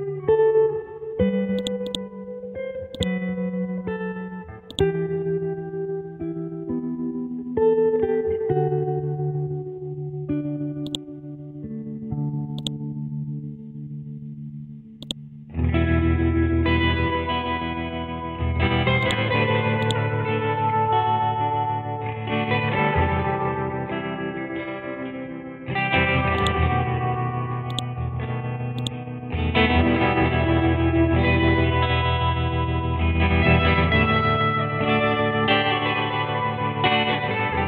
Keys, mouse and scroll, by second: 2.5 scroll up 1, 3.0-4.7 drag, 6.9-7.9 typing, 8.1 Return, 10.9-15.1 drag, 19.0 click, 26.4-31.4 drag, 31.4 shift+Left, 34.2 7, 35.5 Left, 36.0 Right.